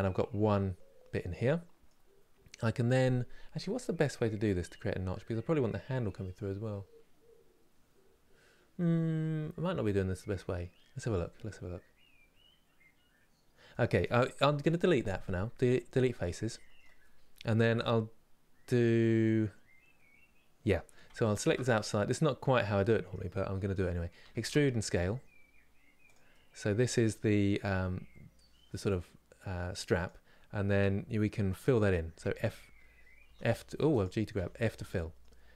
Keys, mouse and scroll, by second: 10.7 scroll down 1, 11.7 scroll up 1, 13.4-15.4 middle drag, 15.4 Delete, 15.7-20.9 middle drag, 21.4-23.9 middle drag, 23.9 e, 26.0-27.4 middle drag, 27.4 g, 30.5-31.8 middle drag, 31.8 g, 34.4-35.5 middle drag.